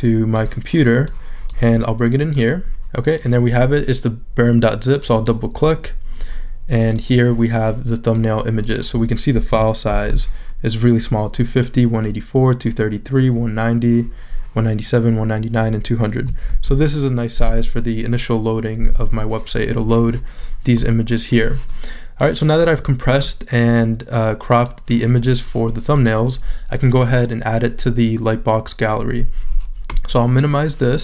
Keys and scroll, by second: 9.9 shift+super+z, 16.5 shift+super+z.